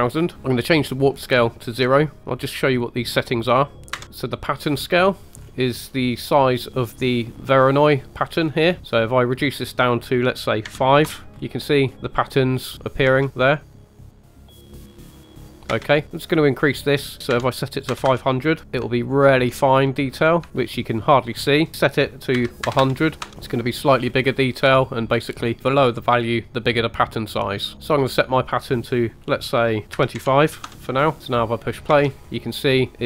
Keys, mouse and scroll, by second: 1.1-4.0 drag, 4.0-6.4 scroll up 8, 8.4-9.3 scroll down 4, 9.3-11.1 drag, 11.3-11.9 scroll down 3, 11.9-12.4 scroll up 1, 13.1 space, 15.8 space, 16.5-17.8 drag, 18.1 KP_0, 18.6 scroll up 4, 19.0-19.5 shift+middle drag, 19.7 scroll up 2, 20.6 scroll down 4, 20.6 space, 21.3-23.3 drag, 22.8 KP_0, 23.4 scroll up 2, 24.0 scroll down 2, 24.1 middle click, 25.2-27.9 drag, 28.4-30.8 drag, 31.2 space, 31.9 space.